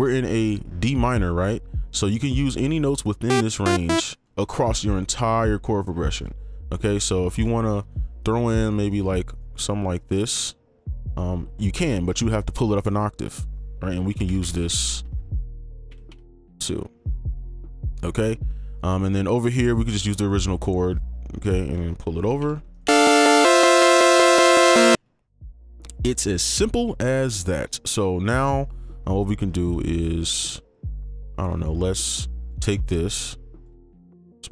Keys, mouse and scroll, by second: 2.4 click, 3.6 double click, 4.1 ctrl+click, 6.5 right click, 7.5 ctrl+click, 8.6 right click, 10.2 ctrl+click, 12.3 ctrl+2, 12.3 ctrl+Up, 14.1 ctrl+b, 14.2 ctrl+b, 14.5 ctrl+b, 14.6 ctrl+b, 14.8 ctrl+b, 14.9 ctrl+b, 15.9 ctrl+b, 16.1 ctrl+b, 16.3 ctrl+b, 17.5 right click, 20.6 ctrl+click, 20.9 ctrl+click, 22.4 ctrl+b, 22.7 right click, 24.9 space, 31.8 ctrl+click, 33.1 shift+click, 34.0 ctrl+Up.